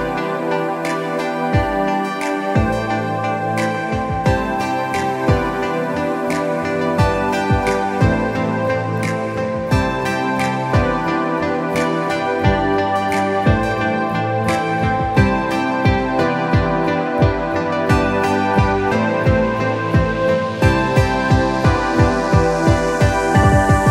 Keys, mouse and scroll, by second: 3.8 alt+scroll up 1, 5.2 space, 5.3 click, 5.6 space, 7.5 click, 16.6 click, 20.0-20.5 scroll down 1, 21.8 click.